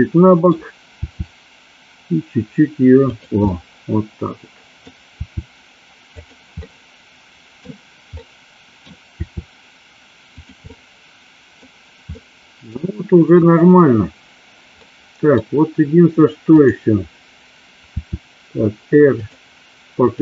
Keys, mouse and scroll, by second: 3.5-4.9 middle drag, 5.2 r, 6.2 click, 6.8 middle click, 7.5 scroll down 1, 8.3-8.9 middle drag, 9.3 r, 10.4 click, 10.7 middle click, 12.3 middle click, 14.9 middle click, 16.7 click, 18.0 r.